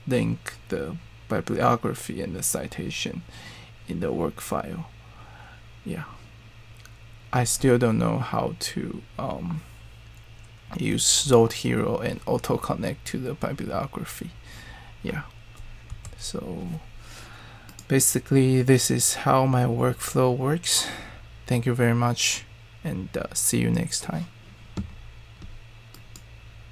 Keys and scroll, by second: 15.9 ctrl+alt+Right.